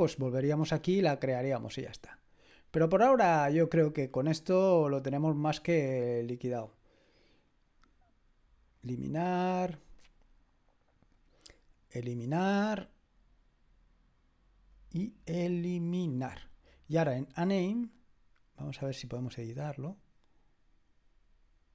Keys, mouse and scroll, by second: 0.1 click, 1.3 click, 3.7 click, 4.9 click, 7.5 click, 8.7 click, 11.1 click, 12.2 click, 14.7 click, 16.1 click, 18.8 click.